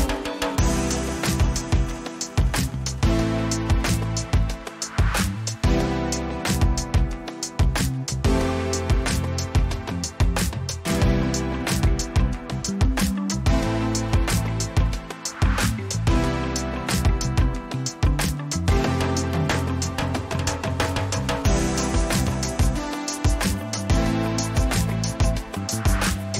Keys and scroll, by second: 2.5 n, 4.9 o, 4.9 ctrl+a, 6.0-8.1 typing, 11.0-12.6 typing, 13.7 ctrl+a.